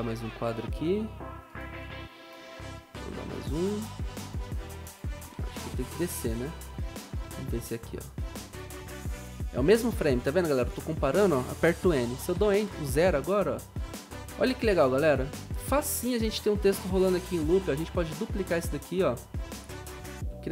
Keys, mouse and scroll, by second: 0.0 ctrl+Right, 0.0 b, 2.9 ctrl+Right, 5.6 ctrl+Left, 5.9 ctrl+Left, 6.1 ctrl+Left, 16.0-16.7 typing, 17.2 ctrl+d, 20.1 ctrl+d, 20.1 v.